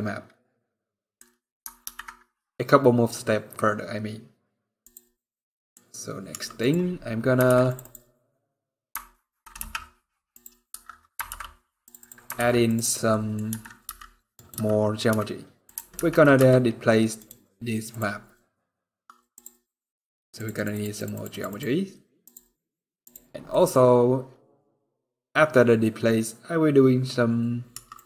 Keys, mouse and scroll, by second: 0.2 middle click, 1.0 scroll up 3, 3.9 ctrl+s, 4.5 click, 4.9-5.2 scroll down 3, 5.1 middle click, 5.5 scroll up 3, 6.0 Tab, 6.6 scroll down 2, 7.2 ctrl+r, 9.3 x, 10.4 2, 11.0 ctrl+r, 12.1 ctrl+r, 12.8 middle click, 13.2 a, 13.6 w, 14.1 right click, 15.7 ctrl+z, 16.1 w, 16.9 right click, 19.1-23.2 click, 23.2 middle click, 23.5 scroll up 2, 24.3 middle click, 27.5 Tab.